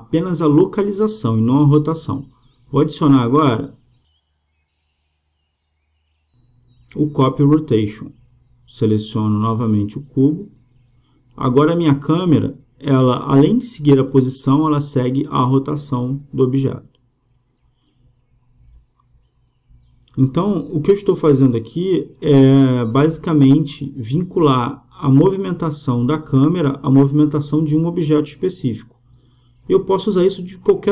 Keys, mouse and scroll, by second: 0.8-2.5 drag, 7.4-9.2 drag, 10.7-12.5 drag, 14.8-16.7 drag, 20.8-22.7 drag, 24.3-26.2 drag, 27.8-29.6 drag.